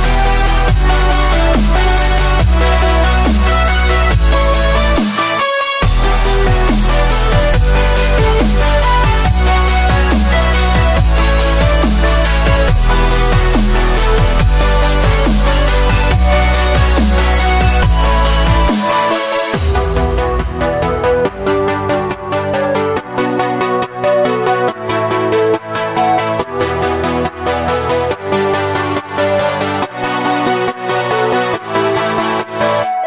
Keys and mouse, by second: 3.0 middle click, 4.3-6.0 drag, 6.2 middle click, 6.5 middle click, 7.0 click, 7.2 click, 7.6 KP_0, 8.0 click, 8.5 click, 9.5 click, 11.9 click, 12.1 middle click, 12.3 KP_0, 13.4-14.7 shift+middle drag, 19.1-21.3 drag, 20.7 KP_0, 24.2 click, 25.2 click, 26.0 click, 26.8 click, 27.7 click, 28.6 click, 29.5 click, 30.3 click, 31.3 click, 32.2 click.